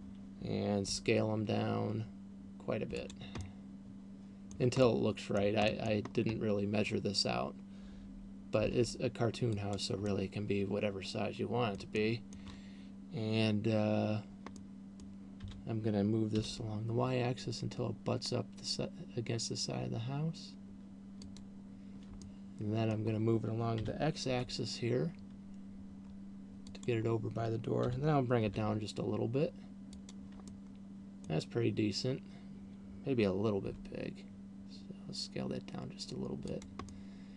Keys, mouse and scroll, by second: 1.1 s, 3.6 click, 3.9 middle click, 5.1 middle click, 5.6 middle click, 6.6-7.6 scroll up 1, 9.1 g, 10.1 click, 10.4 middle click, 12.4 middle click, 15.1 middle click, 15.9 g, 21.9 click, 22.9 middle click, 23.9 g, 27.1 click, 28.4 g, 30.6 click, 30.9 middle click, 34.1 s, 37.1 click, 37.1 middle click.